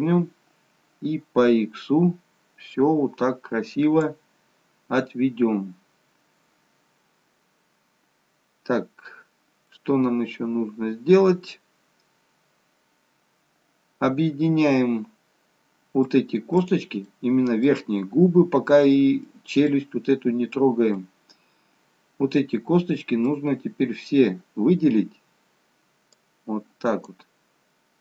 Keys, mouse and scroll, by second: 10.0 middle click, 16.9 click, 17.2 middle click, 24.0 scroll up 1, 26.3 click.